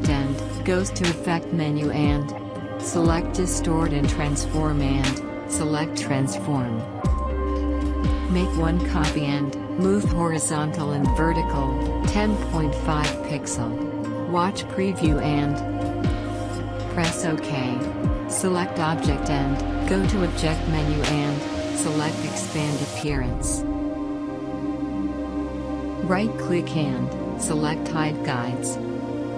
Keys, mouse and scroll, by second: 3.4 click, 8.1 click, 10.9 1, 13.3 typing, 14.4 typing, 15.8 click, 16.4-17.9 typing, 19.1 click, 20.5 typing, 21.2 click, 24.3-25.6 drag.